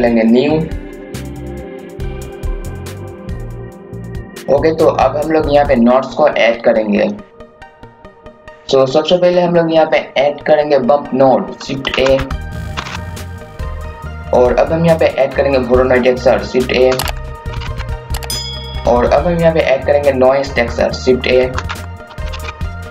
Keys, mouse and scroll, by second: 1.2 KP_4, 1.7 click, 2.3 KP_4, 2.7 click, 3.5 KP_2, 3.7-8.8 drag, 11.9-13.4 typing, 12.4 click, 13.1 click, 16.8-18.2 typing, 17.2 click, 21.4-22.9 typing, 21.8 click, 22.7 click.